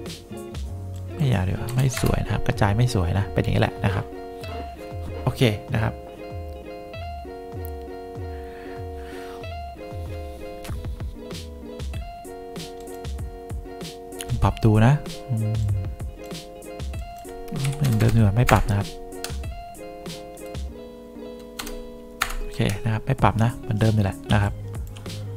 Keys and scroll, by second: 1.8 0, 2.1 Return, 17.5-18.5 typing, 18.6 Return, 21.7 0, 22.3 Return, 24.4 2.